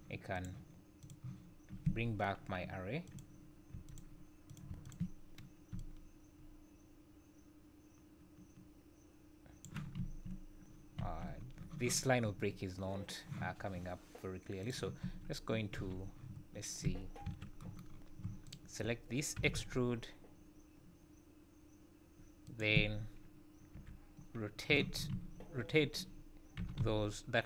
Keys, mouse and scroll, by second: 0.3 click, 3.0 click, 4.5 click, 5.8 shift+click, 10.0 `, 11.0 `, 11.4-13.9 scroll up 2, 14.6 click, 15.0 Tab, 15.7 z, 17.2 KP_1, 17.9 scroll up 4, 18.4 alt+click, 19.3 e, 23.7-26.6 typing, 24.2 scroll down 1, 25.6-26.6 scroll down 4.